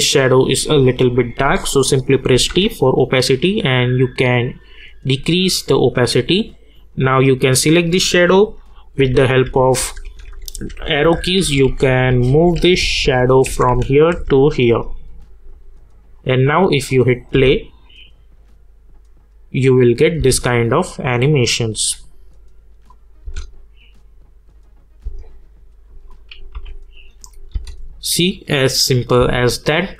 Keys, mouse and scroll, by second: 0.0-1.8 scroll up 1, 2.3 t, 2.9-4.7 drag, 4.7-6.6 scroll down 1, 6.9 click, 9.0 Down, 9.8 Right, 10.5 Down, 11.4 Right, 12.5 Down, 13.5 Right, 14.1 Down, 16.1 click, 17.3 space, 20.2 space, 20.9 click, 23.2 space, 26.1 click, 26.5 u, 27.2 click, 27.5 space.